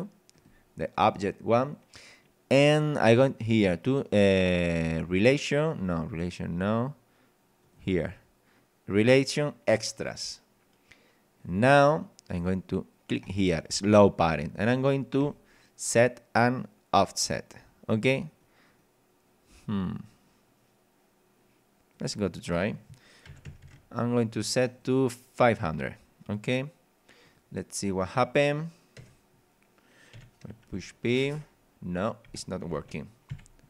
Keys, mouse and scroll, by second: 0.4 click, 6.0 scroll down 1, 7.6 click, 8.1 scroll down 1, 11.4 click, 13.2 click, 15.2 click, 18.3 right click, 18.6 right click, 20.1 right click, 21.9 click, 23.2 KP_5, 23.4 KP_0, 24.7 click, 27.2 click, 28.0 click, 29.0 KP_0, 30.2-32.8 typing, 33.3 Escape.